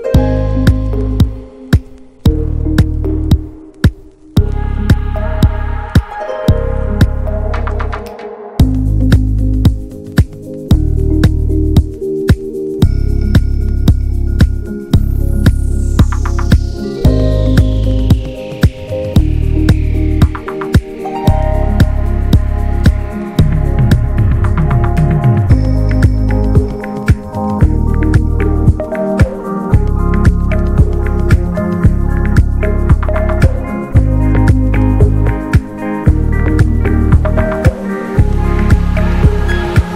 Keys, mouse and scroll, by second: 0.3 scroll up 1, 0.6-2.2 middle drag, 2.2 ctrl+r, 2.7 alt+middle click, 3.2 s, 3.8 middle click, 4.0-4.9 scroll up 2, 4.2 shift+middle click, 4.9 ctrl+b, 7.0 Tab, 7.1 scroll down 1, 7.2-7.8 middle drag, 7.8 click, 8.0 ctrl+a, 8.4 alt+middle click, 8.7 Tab, 8.8-9.3 scroll up 3, 9.3-10.5 shift+middle drag, 10.5 click, 11.6 click, 12.0 alt+shift+click, 12.2 alt+shift+click, 12.7 scroll down 1, 12.9 middle click, 13.5-13.9 scroll down 4, 15.3 click, 15.7 middle click, 16.6-17.4 scroll up 3, 17.4 scroll up 1, 17.4 click, 18.0 alt+shift+click, 19.0 alt+shift+click, 19.5 scroll down 3, 19.7-20.8 middle drag, 20.8 alt+shift+click, 21.1-22.7 middle drag, 22.7-23.2 scroll down 2, 23.2-23.8 scroll up 1, 23.8 alt+shift+click, 25.1 right click, 25.4 Tab, 25.6 Tab, 25.7 a, 26.1 right click, 26.3 a, 26.6 scroll down 3, 26.9 middle click, 28.5-29.6 middle drag, 29.6 click, 30.2 middle click, 30.3-31.8 scroll up 6, 30.5 shift+middle click, 31.8 alt+shift+click, 32.0 scroll down 3, 32.6 alt+shift+click, 32.9 middle click, 33.0 scroll up 1, 33.2-34.7 shift+middle drag, 34.7 right click, 35.1 middle click, 35.6-36.9 scroll up 6, 35.9 middle click, 36.4 shift+middle click, 36.9 middle click, 37.3 alt+z, 38.0 click, 38.7 click, 39.8 alt+z.